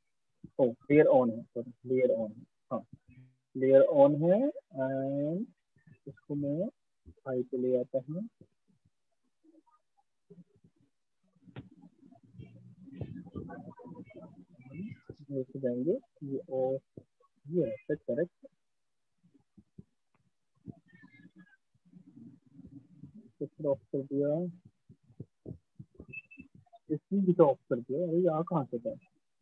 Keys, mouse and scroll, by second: 0.2 click, 5.0 click, 7.2 click, 13.8 click, 14.7 click, 17.0 click, 19.6 click, 20.4 click, 21.5 click, 23.6 click, 24.5 click, 28.0 click.